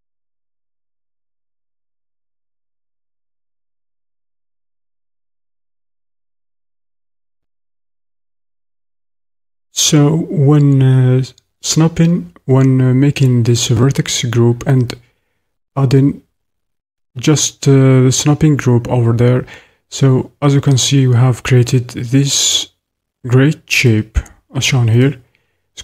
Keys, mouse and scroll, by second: 7.4-25.4 shift+drag.